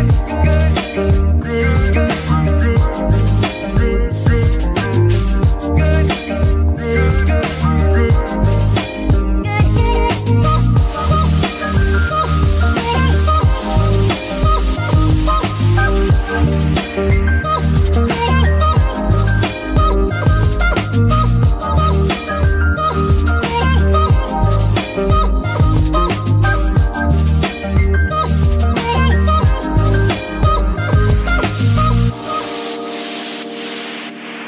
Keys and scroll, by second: 17.0 ctrl+z, 28.3 shift+z, 30.7 z.